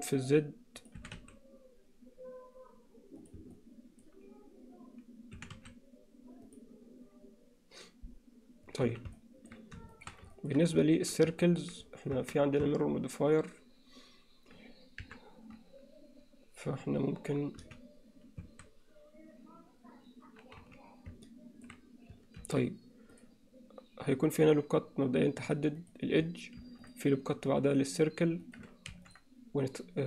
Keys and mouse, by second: 1.0 e, 3.5 middle click, 5.4 e, 8.9 z, 9.2 alt+middle click, 9.9 shift+middle click, 10.3 ctrl+middle click, 11.5 middle click, 12.2 Tab, 12.7 Tab, 15.1 KP_7, 17.6 z, 18.5 a, 20.6 z, 21.3 middle click, 22.4 ctrl+r, 26.6 ctrl+r, 28.9 ctrl+r.